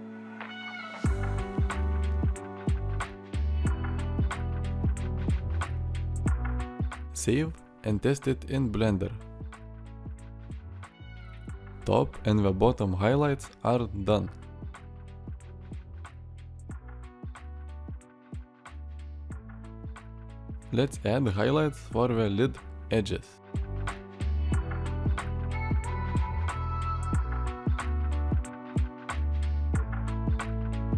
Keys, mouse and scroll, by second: 10.7 alt+r, 11.5 middle click, 14.7-18.5 middle drag, 18.6 middle click, 18.8 shift+middle click, 18.9 middle click, 19.2 shift+middle drag, 19.3 middle click, 19.5-20.1 middle drag, 20.2 shift+middle click, 23.8 Tab, 24.3 click, 24.6 Tab, 24.8 click, 25.1 shift+click.